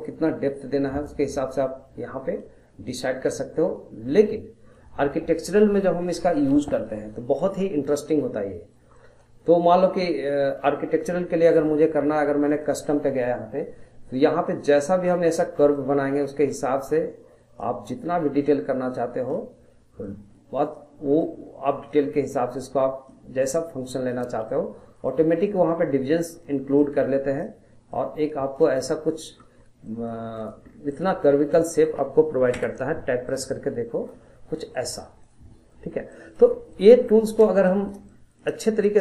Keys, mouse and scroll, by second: 1.4-4.4 middle drag, 6.3 middle click, 7.0-7.3 scroll down 1, 7.3-11.9 middle drag, 12.5 click, 14.4-28.6 drag, 29.1 middle click, 29.6 scroll up 2, 30.0 middle click, 30.4 click, 30.7 scroll down 1, 30.9 middle click, 31.2 scroll up 2, 31.5 middle click, 32.5 Tab, 32.9-33.3 scroll down 1, 33.3-34.3 middle drag, 34.3 scroll up 1, 34.5-34.9 middle drag, 34.9 scroll down 1, 35.2-35.9 middle drag, 35.9 scroll up 1, 36.1 middle click, 36.5 scroll down 1, 36.7-39.0 middle drag.